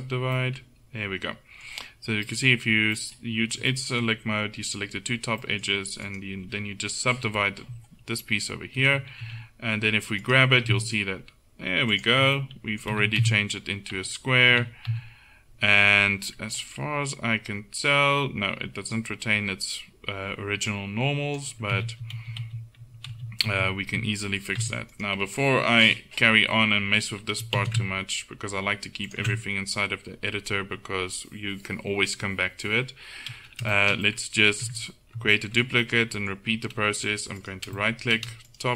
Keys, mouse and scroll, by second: 2.2-6.1 middle drag, 6.1-7.2 right drag, 7.2 KP_7, 9.3 g, 10.6 g, 13.0 z, 13.2 z, 14.6 a, 14.9 a, 20.7-21.9 drag, 21.9 ctrl+z, 22.2 ctrl+z, 22.5 ctrl+z, 23.2 ctrl+z, 23.6 ctrl+z, 24.7 Tab, 25.8 KP_7, 27.6 shift+d, 33.8 middle click, 34.7 Tab, 37.6-38.6 middle drag.